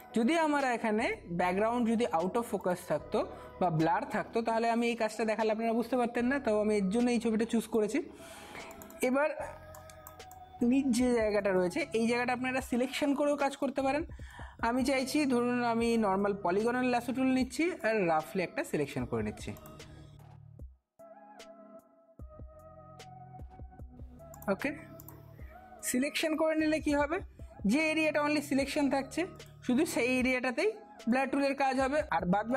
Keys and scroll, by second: 9.7 space.